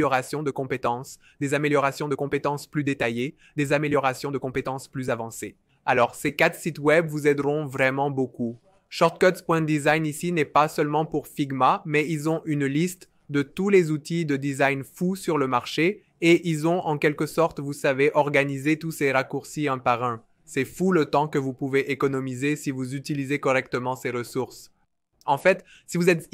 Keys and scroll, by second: 24.4 n.